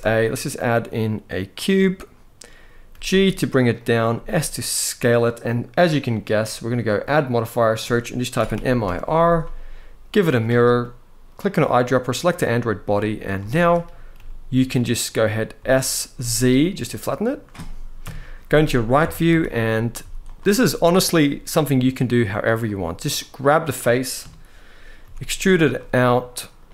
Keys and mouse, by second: 2.6 g, 3.8 s, 4.8 click, 6.6-9.9 drag, 13.1 shift+middle drag, 13.8 g, 14.6 click, 15.3 s, 15.8 z, 16.9 click, 17.7 KP_3, 18.7 Tab, 19.0 z, 19.2 click, 19.7 z, 20.7 click, 22.9 middle click, 23.9 KP_3, 24.7 e.